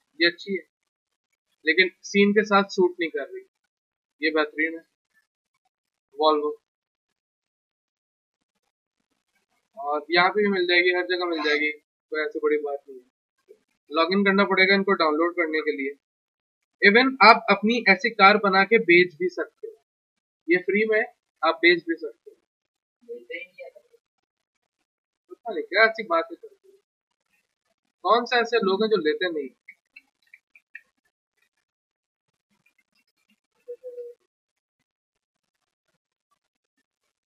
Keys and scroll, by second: 29.1-34.1 typing, 31.4 ctrl+a.